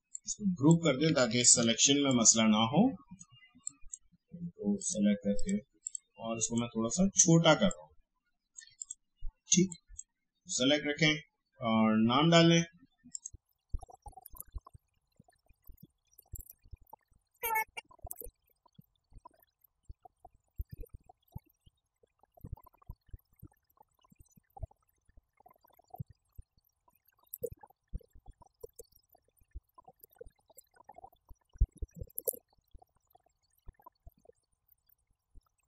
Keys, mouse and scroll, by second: 1.6 ctrl+g, 2.0-3.6 drag, 13.1 click, 13.8-14.8 typing, 14.7 click, 15.1 shift+click, 15.9-16.9 typing, 16.8 click, 18.1 ctrl+t, 18.4 click, 20.1 right click, 20.5 click, 21.0 right click, 21.2 click, 22.3-25.4 drag, 25.4-27.4 drag, 27.4 ctrl+g, 27.4 click, 28.7 space, 28.8 click, 28.9 space, 29.0 click, 31.5-32.7 typing, 32.6 click.